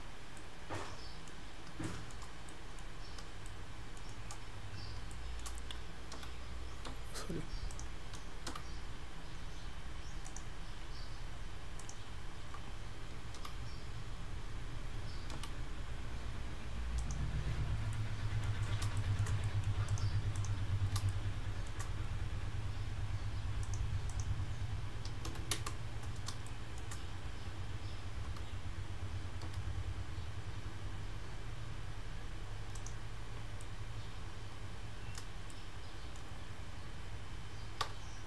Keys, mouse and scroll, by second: 0.1 scroll down 3, 0.4 middle click, 1.6-1.9 scroll up 3, 1.9 shift+middle click, 2.5 middle click, 3.5 shift+middle click, 4.9 scroll up 2, 5.1 shift+middle click, 6.2 f, 8.5 g, 11.8 click, 13.4 g, 17.5-18.0 scroll down 4, 18.0 middle click, 18.8 scroll up 2, 19.0 shift+middle click, 19.5 middle click, 19.9 click, 20.4 click, 21.1 shift+middle click, 23.7 click, 26.4 shift+scroll up 1, 26.5 shift+middle click, 28.3 g, 33.2-33.6 scroll up 1, 33.6 middle click, 35.5 shift+middle click, 37.9 Tab.